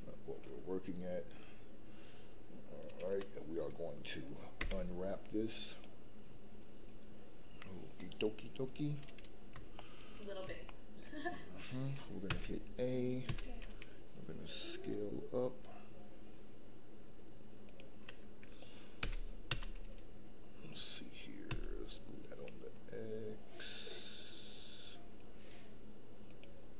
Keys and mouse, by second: 4.6 u, 9.8 shift+middle click, 10.6 shift+middle click, 12.3 a, 13.2 s, 17.6 click, 19.0 g, 19.5 z, 21.5 x, 26.2 click.